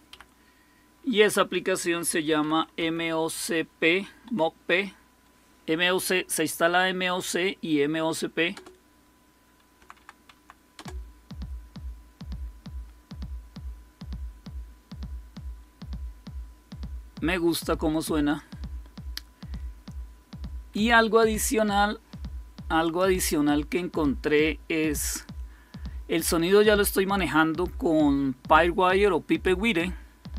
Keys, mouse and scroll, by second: 0.0 Up, 1.1 Down, 1.9-4.1 typing, 8.4 Return, 9.7 Down, 9.9 Down, 10.2 Down, 10.6 Return, 22.7 click, 23.4 click.